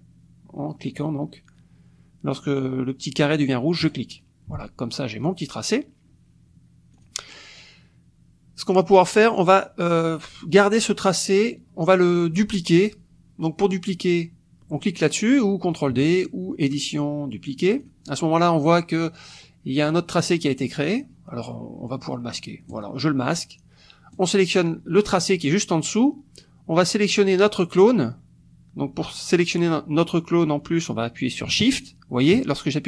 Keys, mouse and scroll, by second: 3.8 click, 6.9 click, 16.6 click, 17.8 click, 22.7 click, 24.1 click, 31.7 shift+click.